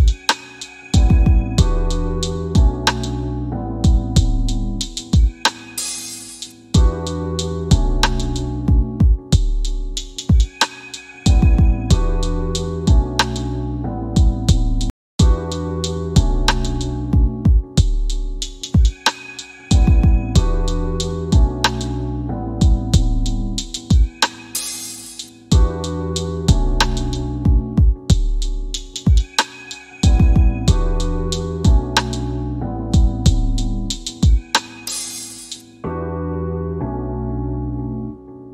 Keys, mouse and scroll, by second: 1.9 8, 12.9 click, 17.8 c, 18.6 f, 19.5 click, 28.6 middle click, 29.3 scroll down 1, 30.7 click, 34.0 click.